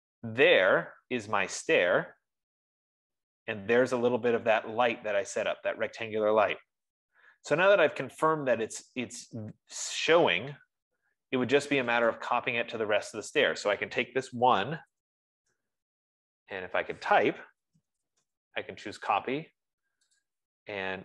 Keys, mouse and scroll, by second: 12.7 click, 15.0-16.4 typing, 18.8-19.5 typing, 20.8-21.0 typing.